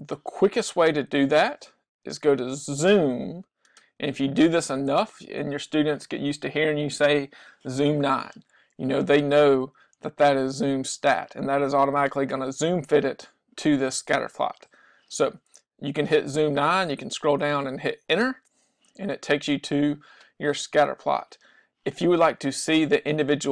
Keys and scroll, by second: 18.3 9.